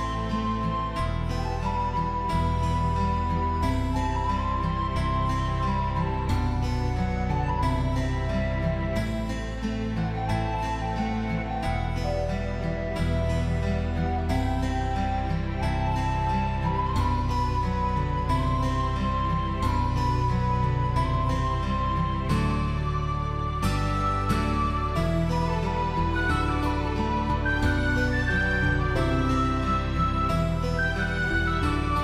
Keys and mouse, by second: 0.1-0.9 ctrl+z, 1.1 ctrl+z, 1.3 click, 2.4 s, 2.8 click, 3.1 click, 3.4 s, 3.9 click, 4.2 alt+click, 4.5 s, 4.9 right click, 5.0 middle click, 5.4 Tab, 5.6 alt+middle click, 5.8 alt+middle click, 6.1 shift+middle click, 6.5 shift+middle click, 6.7 click, 7.1 middle click, 7.9 alt+click, 8.2 shift+click, 8.3 alt+click, 8.4 alt+middle click, 8.6 shift+middle click, 8.9 shift+middle click, 9.1 alt+middle click, 9.3 alt+middle click, 9.5 alt+middle click, 9.7 shift+middle click, 10.2 shift+middle click, 10.8 click, 11.2 shift+middle click, 11.6 click, 11.8 Tab, 12.1 middle click, 12.9 alt+middle click, 13.1 middle click, 13.3 shift+middle click, 14.5 click, 14.7 alt+z, 14.8 middle click, 15.1 g, 15.6 click, 15.9 click, 16.0 g, 16.9 click, 17.3 click, 17.4 shift+middle click, 17.8 g, 18.3 click, 18.5 g, 18.6 click, 19.0 shift+middle click, 19.4 Tab, 19.6 alt+middle click, 19.7 alt+z, 19.9 shift+click, 20.1 alt+middle click, 20.3 middle click, 20.6 alt+middle click, 20.8 alt+middle click, 21.0 middle click, 22.2 shift+middle click, 22.5 Tab, 22.7 shift+middle click, 23.0 alt+z, 23.2 click, 23.4 g, 23.7 click, 24.0 click, 24.2 alt+click, 24.6 click, 24.8 g, 25.4 click, 25.8 alt+middle click, 25.9 alt+z, 26.1 alt+middle click, 26.4 shift+middle click, 26.6 click, 26.9 shift+middle click, 27.2 Tab, 27.4 Tab, 27.6 Tab, 27.7 middle click, 28.0 middle click, 28.3 middle click, 29.0 alt+middle click, 29.4 shift+middle click, 29.6 alt+middle click, 29.9 shift+middle click, 30.7 ctrl+s.